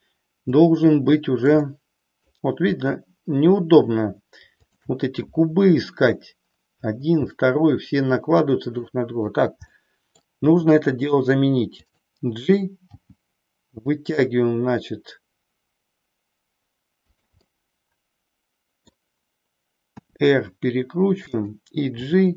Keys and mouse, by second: 1.5 middle click, 4.7 shift+click, 7.3-9.3 middle drag, 9.7 middle click, 10.4 r, 12.8 g, 17.2 click, 17.4-18.9 middle drag, 19.9 r, 21.4 click, 21.9 g.